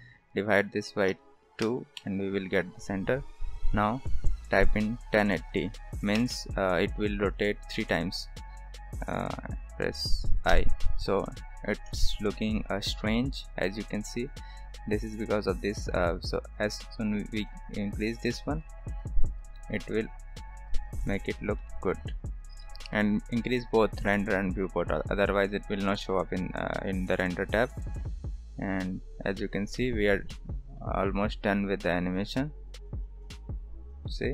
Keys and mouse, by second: 0.0-2.5 drag, 3.7-6.8 drag, 10.5 i, 11.2-14.5 middle drag, 18.6 click, 21.6-22.3 middle drag, 22.6 shift+middle drag, 27.4 click, 29.4 shift+middle drag, 30.3-30.6 middle drag, 32.2-34.3 drag.